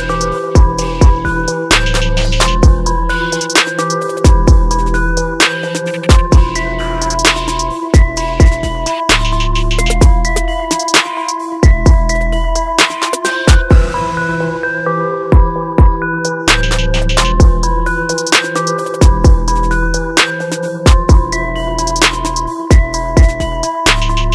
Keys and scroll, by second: 2.6 ctrl+u, 8.9 ctrl+alt+z, 18.2 ctrl+=.